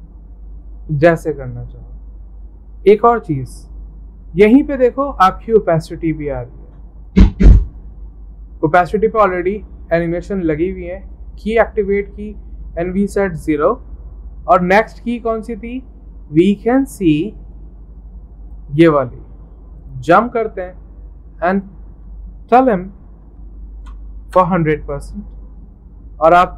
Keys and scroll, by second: 23.2-24.0 typing, 24.3 Return.